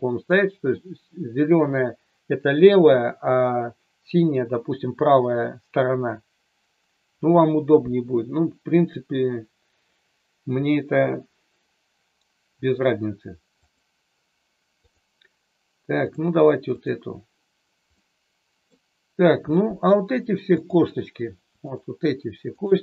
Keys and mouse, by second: 13.6 click, 14.7-16.1 drag, 16.7 click, 18.0-18.6 middle drag, 19.5 middle click, 21.7-22.1 shift+drag, 22.6-22.8 shift+drag.